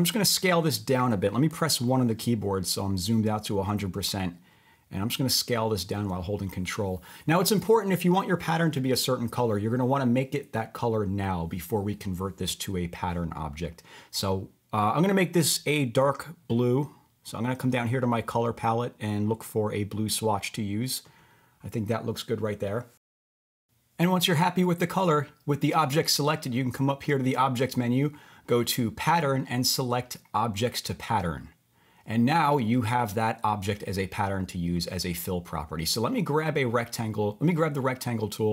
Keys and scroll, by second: 1.7 1.